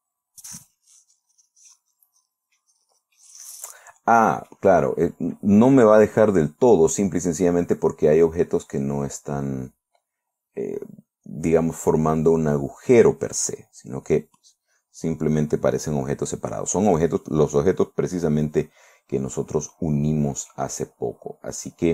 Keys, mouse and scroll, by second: 1.5-1.9 scroll up 2, 2.1-3.3 drag, 3.7-5.1 drag, 6.5-7.1 scroll down 2, 7.8-8.2 scroll up 1, 14.1 scroll down 1, 17.5 scroll down 1, 18.0-21.2 drag, 21.3-21.8 scroll up 1.